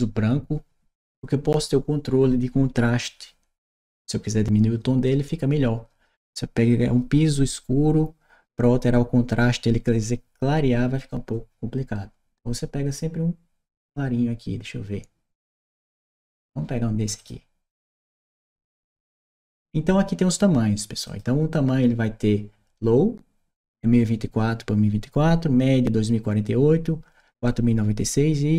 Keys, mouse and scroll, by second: 17.0 click, 20.8 click.